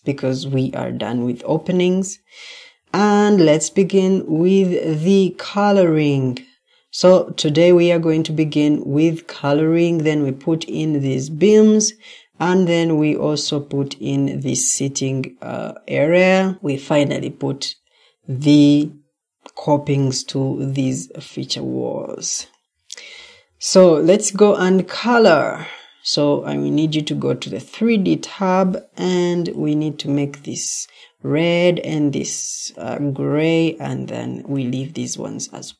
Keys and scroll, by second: 0.5 Delete, 23.4 Escape, 28.2 Escape.